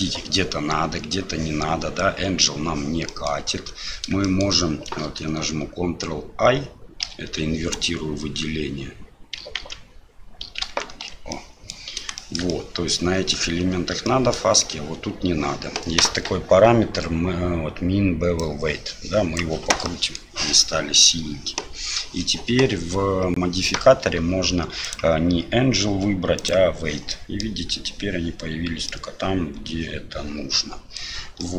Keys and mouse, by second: 3.1 click, 3.4 Tab, 4.2 shift+click, 7.0 ctrl+i, 7.7 click, 9.6 ctrl+z, 10.6 ctrl+z, 11.3 click, 12.2 shift+click, 12.5 middle click, 14.1 middle click, 18.4 click, 19.8 middle click, 21.8 Tab, 24.8-26.5 drag, 27.1-27.4 middle drag, 28.8-31.0 middle drag, 31.4 middle click.